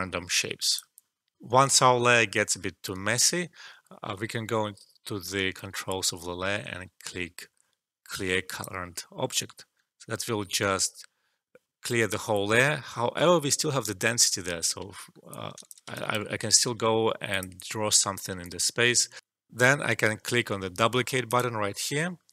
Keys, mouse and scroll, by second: 1.3 alt+F12, 8.5 click, 14.9 click, 15.0 alt+middle click, 15.3 alt+click, 15.9 alt+shift+right click, 16.6 e, 17.2 click, 18.4 alt+click, 19.2 alt+F12, 21.2 click.